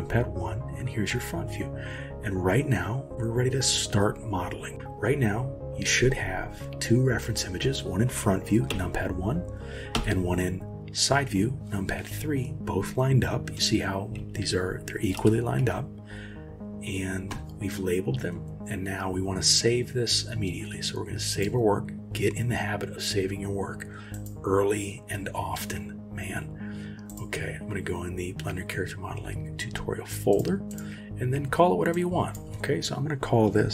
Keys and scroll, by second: 8.7 KP_1, 10.0 KP_3, 13.6-15.6 typing.